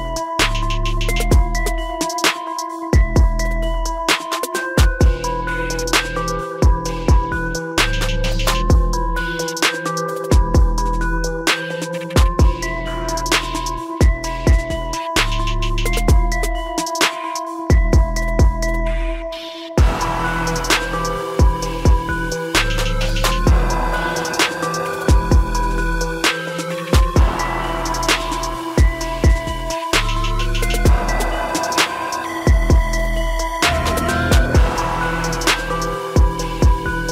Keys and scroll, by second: 16.8 ctrl+-, 23.8 ctrl+shift+i.